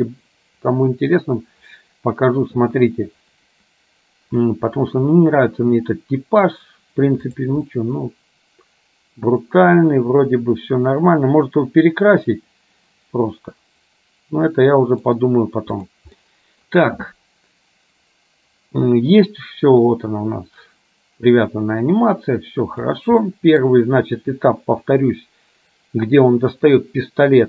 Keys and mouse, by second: 5.4-6.6 middle drag, 7.4 click, 7.7-15.1 middle drag, 16.4 middle click, 20.0-23.1 drag, 23.4 middle click.